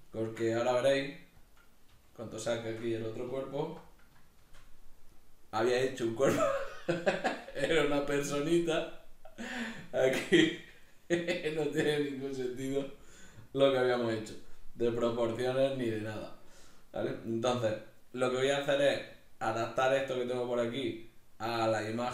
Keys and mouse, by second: 0.1-1.5 ctrl+middle drag, 0.8 g, 1.5 click, 1.9 g, 2.4 click, 2.6-5.1 shift+middle drag, 3.6 alt+h, 5.1 right click, 13.7 right click, 14.8 g, 16.2 right click, 22.0 right click.